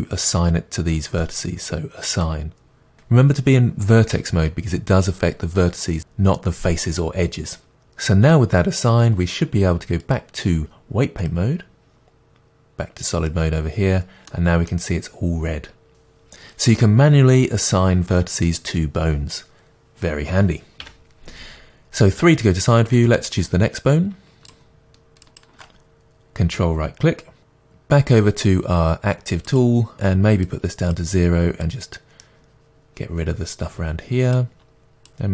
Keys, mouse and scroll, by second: 10.0-13.3 drag, 14.3-17.7 middle drag, 20.8 KP_3, 22.3-22.8 scroll down 1, 25.3 ctrl+click, 29.5 click, 30.5-35.3 drag.